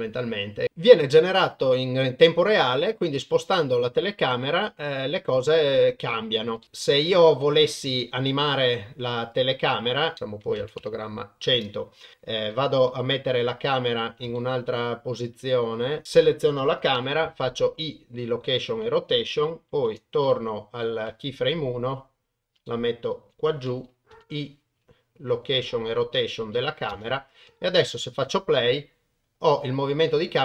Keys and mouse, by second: 0.6 ctrl+alt+shift+g, 0.6 shift+middle click, 0.6 n, 1.4-6.6 middle drag, 6.6 shift+middle drag, 6.7 shift+middle click, 9.3 click, 10.1 click, 12.3 shift+Right, 13.1 click, 13.2 middle click, 13.8 click, 14.3 ctrl+click, 14.7-15.9 ctrl+middle drag, 17.0 i, 19.7 shift+Left, 20.8 middle click, 21.6 click, 22.7 shift+click, 22.9 shift+middle drag, 24.1 i, 26.9 shift+space.